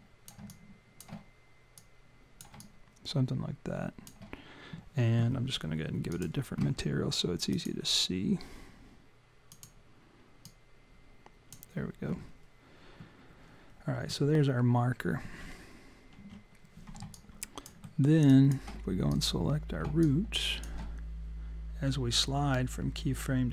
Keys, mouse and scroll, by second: 0.5 alt+click, 1.8 click, 2.6 alt+click, 6.1 click, 7.5 click, 9.5 click, 16.2 w, 17.2 alt+click, 17.9 alt+middle click, 18.3 alt+click, 19.1 click, 20.0 alt+click.